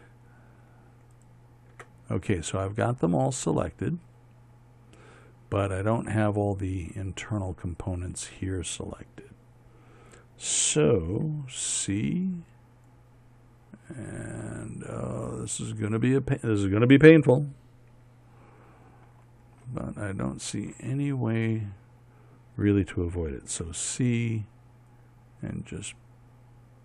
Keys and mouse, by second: 2.7-4.0 middle drag, 4.4 middle click, 12.1 c, 20.6-24.0 middle drag, 24.1 c.